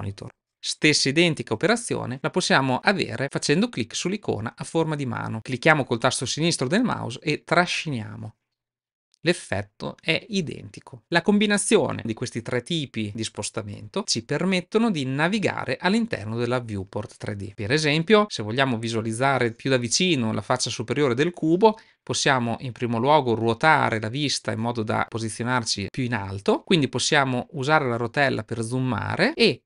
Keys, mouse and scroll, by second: 7.2-11.0 drag, 22.3-24.4 middle drag.